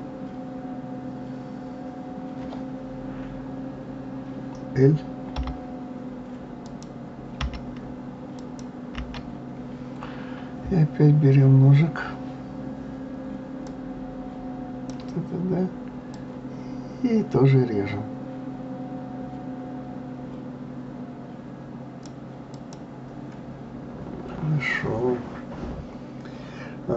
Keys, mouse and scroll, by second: 6.7 click, 7.4 l, 8.3 click, 9.0 l, 13.6-16.2 drag, 22.5 click.